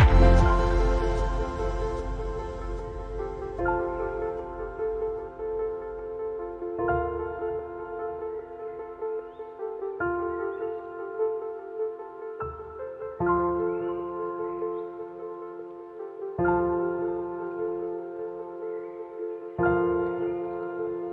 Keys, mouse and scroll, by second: 4.1 alt+scroll down 1, 5.1 alt+scroll down 1, 17.1 ctrl+;.